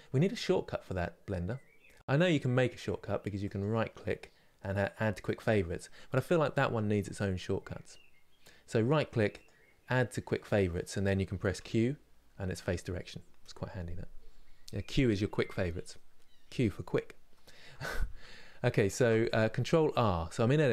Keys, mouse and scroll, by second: 17.0 middle click, 17.7 Tab, 18.6 ctrl+r.